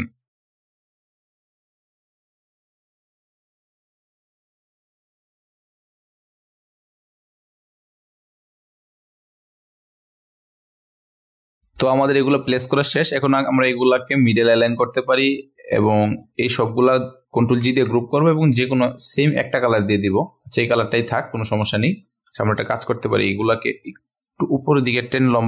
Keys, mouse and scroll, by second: 0.3 ctrl+alt+scroll up 1, 0.5-1.3 scroll down 1, 1.4 ctrl+alt+scroll down 1, 1.5 click, 2.2 ctrl+alt+scroll up 1, 2.3-5.1 drag, 5.2 click, 5.5 click, 6.0 scroll down 1, 6.1 click, 7.2 ctrl+a, 7.4 click, 8.1 ctrl+alt+scroll up 1, 8.2 click, 8.5 click, 8.8 ctrl+alt+scroll up 1, 8.8 click, 9.2 click, 9.7 click, 10.0 click, 10.4 ctrl+alt+scroll up 1, 10.5 click, 11.2 ctrl+alt+scroll down 1, 11.3 click, 11.5 ctrl+g, 11.5-16.5 drag, 17.2 ctrl+g, 19.3 click, 21.1-25.4 drag.